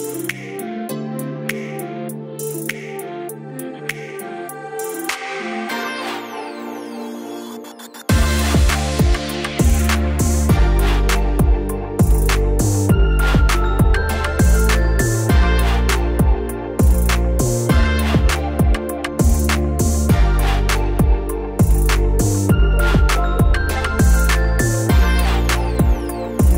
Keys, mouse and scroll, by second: 5.1 middle click, 7.1 click, 10.0-12.7 drag, 16.3-17.3 typing, 19.0 click, 19.1-19.8 typing, 23.2 click, 25.2 right click.